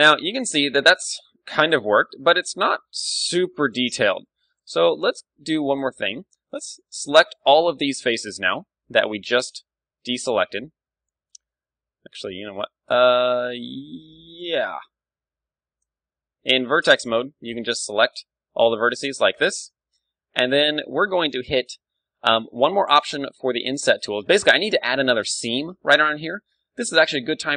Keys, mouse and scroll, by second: 3.7 KP_1, 4.5-6.1 middle drag, 4.9 ctrl+Tab, 6.6 z, 7.1 b, 9.6 z, 11.0 a, 11.4 ctrl+z, 11.6 ctrl+z, 11.9 ctrl+z, 12.4 ctrl+z, 13.7 ctrl+Tab, 15.6 z, 15.9 space, 17.4 b, 19.3 z, 19.6-26.7 middle drag, 27.1 click.